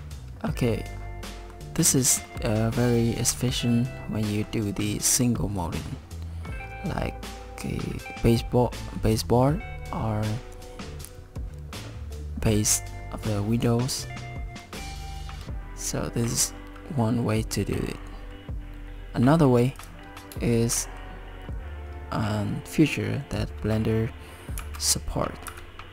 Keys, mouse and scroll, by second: 0.9 scroll down 3, 1.3 middle click, 1.8 scroll up 5, 2.3 middle click, 3.7 middle click, 5.7 middle click, 14.6 middle click, 15.0 shift+middle click, 15.0 click, 19.8 click, 20.7 shift+middle click, 24.6 shift+s.